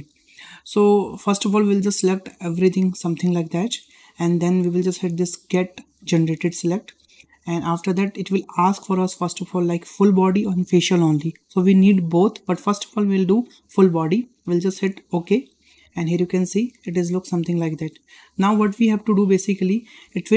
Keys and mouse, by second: 0.4-0.9 shift+middle drag, 2.0-3.5 drag, 6.9-15.3 drag, 19.2-19.8 shift+middle drag.